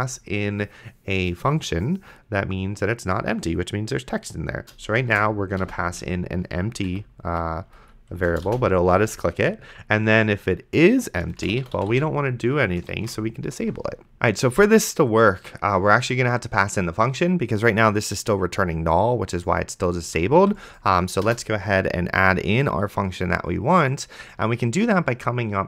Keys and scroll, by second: 3.8 space, 4.9-5.9 typing, 6.9 Right, 7.7 Left, 8.1 space, 8.7 shift+;, 11.2-12.3 typing, 13.2 ctrl+s, 20.4 d, 21.3 BackSpace.